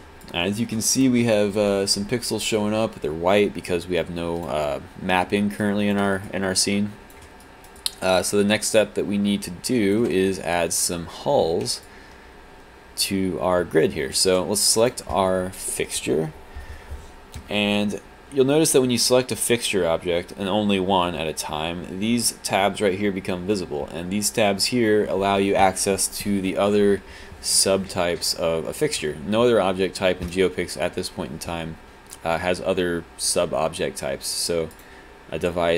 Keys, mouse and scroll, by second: 0.2 alt+click, 3.7 alt+click, 5.6 click, 6.3 alt+click, 7.4 alt+right click, 7.8 click, 8.8 alt+click, 11.9 alt+click, 14.1 click, 15.0 click, 34.9 click.